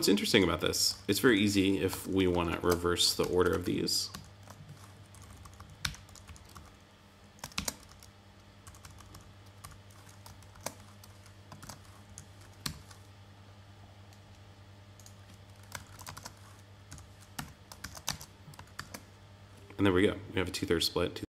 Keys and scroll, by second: 1.2 Down, 2.0 super+l, 3.2 super+c, 3.6 super+v, 5.1 Up, 5.8 Return, 6.0 Down, 6.5 Up, 7.5 ctrl+super+Down, 7.8 Up, 10.3 super+l, 11.5 shift+super+l, 12.0 Right, 12.6 Tab, 15.7 super+l, 16.8 Right, 17.3 Tab, 17.8 super+s, 18.0 super+Tab.